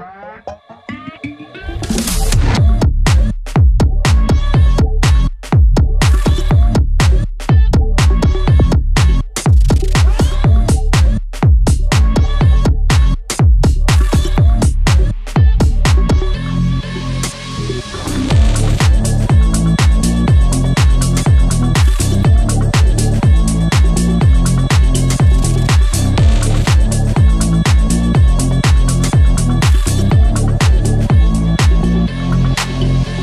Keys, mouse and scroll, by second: 2.0 click, 4.1-5.1 scroll up 1, 5.2-10.6 drag, 11.0 click, 12.2 scroll up 1, 12.7 scroll down 1, 13.8 scroll down 1, 14.5 click, 15.0-15.7 scroll down 1, 16.2 scroll down 1, 16.4 scroll up 1, 17.7 click, 19.1 click, 20.6 click, 23.5 click, 23.7-24.5 scroll up 1, 24.5-26.4 drag, 26.4 scroll down 1, 26.7 scroll up 1, 27.3-30.4 drag, 30.4 scroll down 1, 30.8 scroll up 1, 32.0 click, 33.1-33.2 scroll up 1.